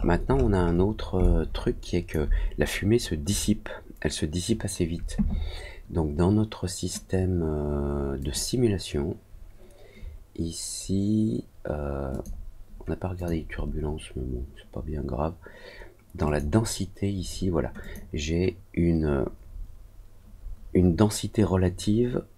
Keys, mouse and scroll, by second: 0.0-0.8 scroll up 3, 1.1 alt+click, 8.1 click, 10.2 middle click, 10.6 middle click, 12.0 click, 13.1 click, 14.8 middle click, 16.2 click, 17.7 click.